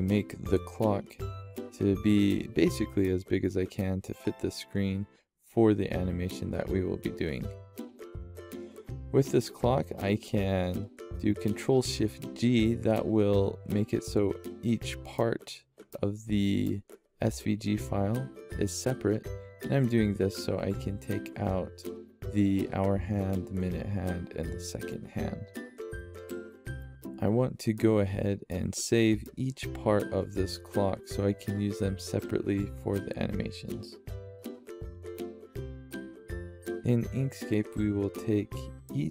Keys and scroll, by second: 7.8 ctrl+s, 21.7 ctrl+s, 32.3-33.6 typing.